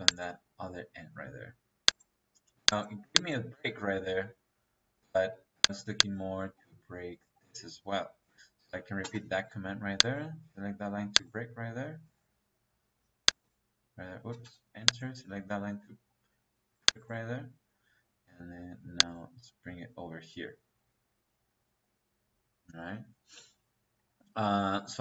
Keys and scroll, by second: 2.3 Escape, 4.4 Escape, 5.2 Escape, 7.3 Escape, 8.9 -, 13.8 Escape, 14.2 space.